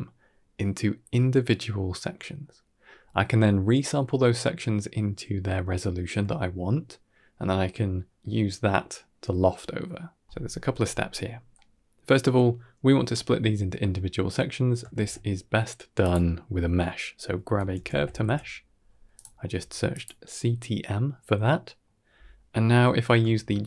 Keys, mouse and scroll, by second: 11.0 scroll up 4, 11.4-12.1 middle drag, 14.8 shift+a, 19.4 g, 20.3 middle click, 21.1-21.7 middle drag, 23.3 shift+a.